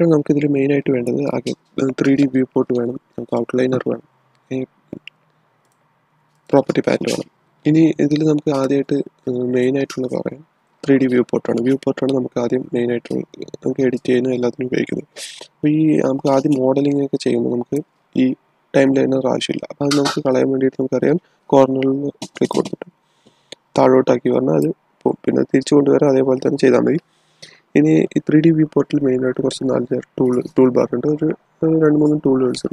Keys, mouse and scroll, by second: 5.5 click, 8.5 typing, 16.2-19.9 drag, 16.6 typing, 17.9 typing, 19.5 typing, 22.4-26.6 drag.